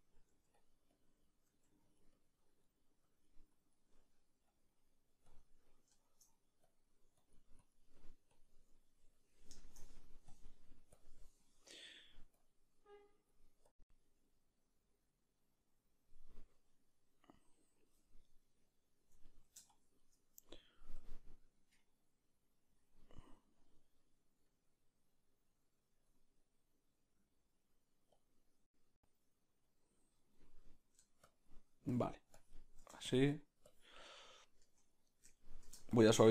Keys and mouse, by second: 0.6 middle click, 0.6 f, 1.3-30.6 drag, 1.9 f, 2.6 middle click, 3.9 middle click, 4.9 middle click, 5.6 middle click, 7.9 middle click, 8.8 ctrl+middle click, 9.1 middle click, 9.5 shift+middle click, 9.8 middle click, 18.2 middle click, 19.2 ctrl+middle click, 20.4 middle click, 30.6 middle click, 31.2 shift+click, 31.5 shift+click, 34.2-35.9 middle drag, 35.9-36.3 shift+drag.